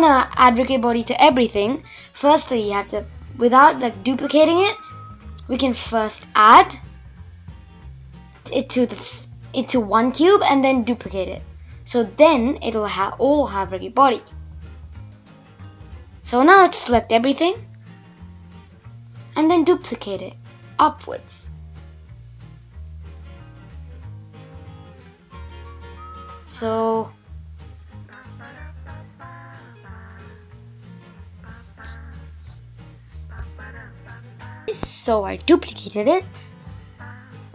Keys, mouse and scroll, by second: 1.0-2.3 drag, 3.2-4.5 drag, 5.5-6.6 drag, 7.7-8.8 drag, 9.2 click, 9.8 click, 10.2 click, 10.6 click, 13.5 shift+click, 14.1 shift+click, 14.6 shift+click, 15.1 shift+click, 15.7 shift+click, 16.2 shift+click, 16.6 shift+click, 16.9-17.4 middle drag, 17.4-17.7 scroll up 2, 17.7-18.5 middle drag, 18.5 scroll up 1, 18.6-19.5 middle drag, 19.5 shift+d, 22.4-22.8 scroll up 2, 22.8 middle click, 23.4-23.9 scroll down 1, 23.9-24.8 middle drag, 24.8-25.5 scroll up 1, 25.5 g, 32.3-32.7 scroll down 3, 32.7-33.8 middle drag, 35.4-37.5 scroll up 1.